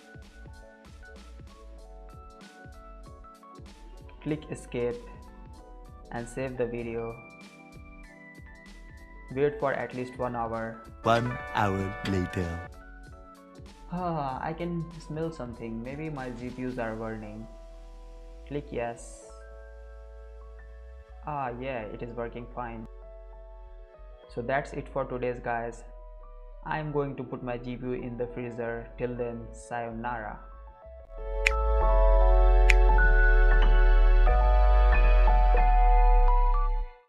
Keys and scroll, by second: 0.0-4.8 typing, 4.9 Escape, 7.1-8.3 typing.